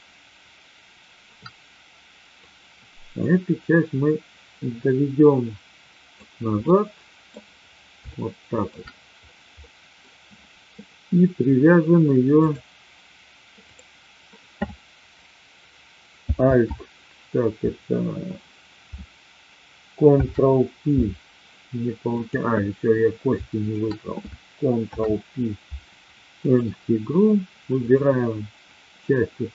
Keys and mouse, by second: 2.4-6.2 drag, 6.5-7.3 middle drag, 8.1-8.7 shift+middle drag, 9.5-10.1 middle drag, 13.7 click, 16.3 alt+p, 20.1 ctrl+p, 22.1 click, 24.8 ctrl+p, 27.8 click.